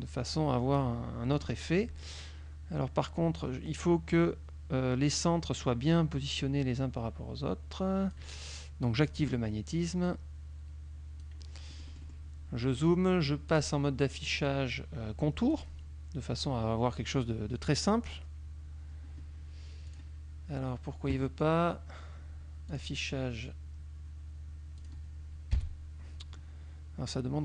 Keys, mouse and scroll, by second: 1.4 middle click, 6.0-8.4 drag, 9.1 click, 10.1-11.5 drag, 11.8 middle click, 13.6 click, 15.6 click, 20.0 click, 22.8 click, 24.8 click, 25.6 KP_5.